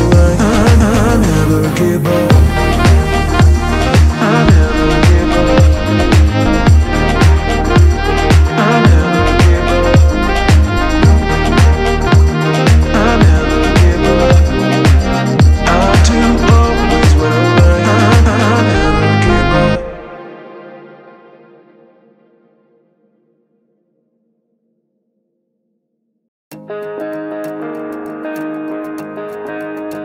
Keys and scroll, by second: 0.5 Escape, 5.1 Return, 16.5 Escape, 19.1 Return, 19.6 F3, 20.8 Return, 22.0 F10, 23.1 Return, 26.3 Escape, 28.6 Return, 29.0 Escape.